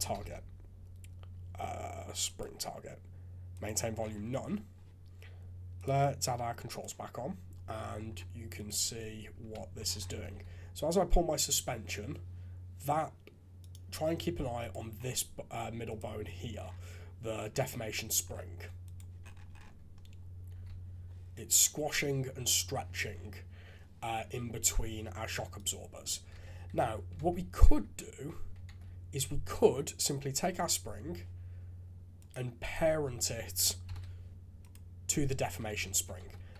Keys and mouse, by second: 3.5 click, 5.7 click, 6.7 click, 7.7 drag, 8.5 click, 9.4 KP_3, 10.3 g, 14.6 click, 20.5 g, 26.3 shift+z, 27.2 ctrl+Tab, 27.6 shift+z, 28.7 ctrl+Tab, 32.2 click, 32.7 click, 33.8 ctrl+p, 35.7 alt+a, 36.2 ctrl+Tab.